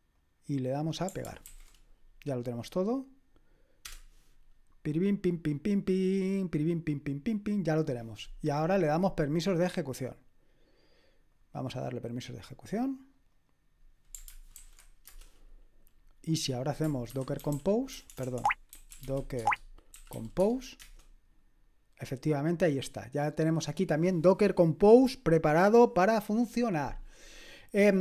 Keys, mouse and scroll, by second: 0.1-1.5 middle drag, 0.1-1.5 right drag, 1.5 ctrl+alt+v, 3.8 Return, 9.6-12.1 drag, 11.6 right click, 12.6-14.5 drag, 13.4-14.5 right drag, 14.5 ctrl+alt+v, 15.1 Return, 17.1-20.8 typing, 27.5-28.0 scroll down 1.